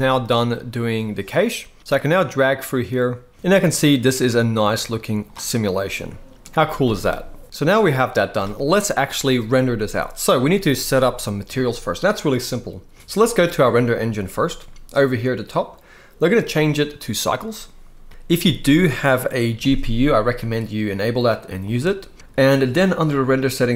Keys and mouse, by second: 1.8-5.1 drag, 5.5-6.1 middle drag, 7.4 middle click, 7.4 space, 13.3 click, 16.0-17.1 drag, 20.2-21.5 drag.